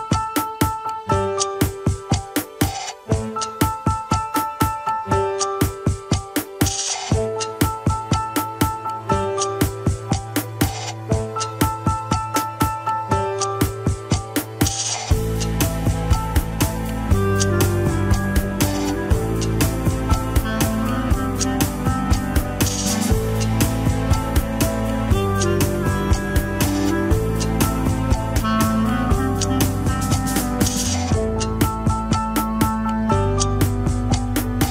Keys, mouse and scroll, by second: 0.5 ctrl+click, 0.8-1.9 middle drag, 1.9 ctrl+click, 2.6 ctrl+click, 3.9 ctrl+click, 4.3 middle click, 4.9 scroll down 2, 6.5 ctrl+click, 6.6 alt+z, 7.9 ctrl+click, 8.4 ctrl+click, 8.7 alt+z, 9.0 scroll up 2, 10.0 ctrl+click, 11.1 ctrl+click, 11.9 ctrl+click, 13.5 middle click, 14.0 alt+z, 16.0-17.3 middle drag, 17.3-17.7 scroll up 2, 17.9-19.2 middle drag, 19.2 click, 19.6 scroll up 2, 20.3-22.5 drag, 22.5 ctrl+z, 23.4 ctrl+click, 24.0-28.4 middle drag, 29.8 ctrl+click, 31.7-34.7 drag.